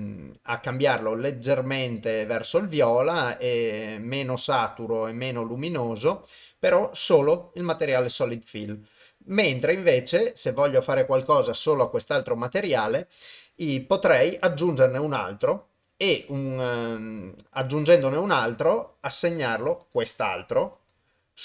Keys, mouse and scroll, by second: 3.0-4.0 drag, 4.8-6.1 drag, 14.5-17.6 drag, 19.8 click, 20.9 click.